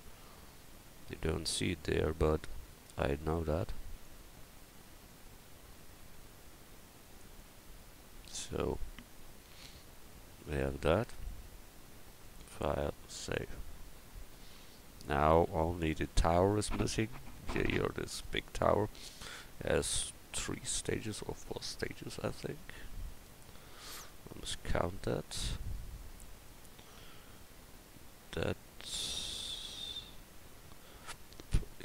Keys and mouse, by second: 1.4 Tab, 4.0 right click, 5.0-6.3 drag, 8.3 Tab, 14.6 KP_1.